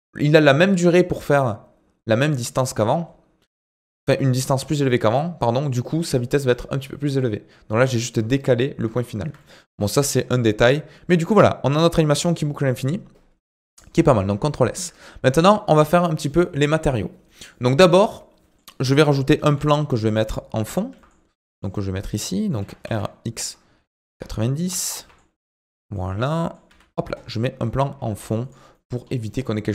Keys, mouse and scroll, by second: 9.0-9.4 scroll down 2, 9.4 shift+middle click, 9.7 scroll up 2, 10.0-11.7 shift+middle drag, 11.7 click, 13.3 space, 14.0 ctrl+s, 14.5 shift+middle click, 15.3-16.3 scroll up 1, 16.3 middle click, 17.0 scroll down 5, 17.2 middle click, 17.7 scroll down 3, 17.9 middle click, 18.7-19.4 scroll up 1, 19.4 shift+a, 20.9 g, 21.7 middle click, 22.6 r, 24.9 g, 26.1 scroll down 1, 26.4 middle click, 26.6 s, 28.7 middle click, 29.0-29.7 scroll up 7.